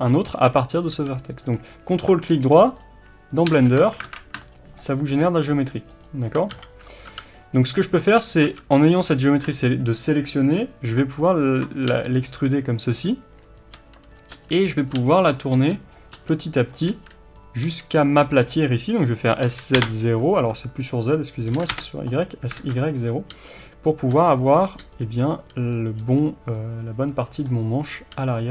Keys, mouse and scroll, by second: 2.5 ctrl+right click, 3.5 ctrl+z, 4.0 alt+a, 4.5 ctrl+right click, 6.8 b, 7.7 x, 8.1-8.8 scroll up 1, 8.8 b, 11.2 ctrl+right click, 11.9 g, 14.9 g, 15.3 click, 15.5 r, 16.1 e, 16.7 click, 16.9 r, 20.4 right click, 21.5 s, 22.6 alt+a, 23.0 click, 23.3 g, 23.8 click, 24.2 g, 24.7 click, 24.8 g, 25.3 click, 26.0 g, 27.8 click, 28.1 g.